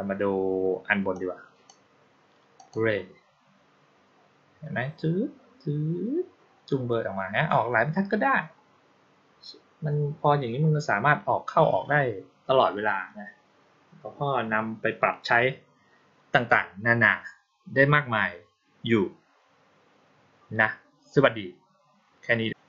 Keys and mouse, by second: 1.0-1.5 drag, 2.4 click.